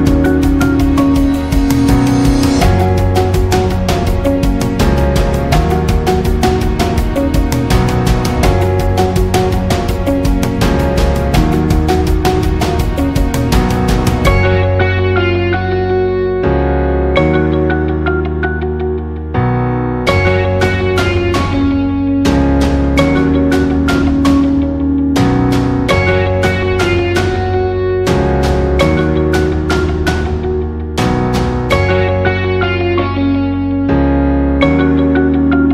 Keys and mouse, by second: 0.0 right click, 0.3 c, 1.8 g, 4.6 right click, 5.0 c, 6.0 g, 7.4 c, 8.0 g, 8.9 right click, 9.3 c, 10.4 g, 12.7 alt+z, 13.2 shift+middle click, 14.0 alt+z, 14.3 c, 15.5 g, 17.3 right click, 17.3 g, 19.4 c, 20.2 g, 21.1 alt+z, 22.1-23.3 middle drag, 23.9 right click, 24.3 g, 25.3 middle click, 26.6 right click, 27.5 KP_3, 28.1 g, 30.4 shift+middle click, 30.9-31.3 middle drag, 31.7 middle click, 32.3 shift+middle click, 33.2 shift+middle click, 33.9 alt+right click, 34.3 middle click, 34.9 f, 35.4 middle click.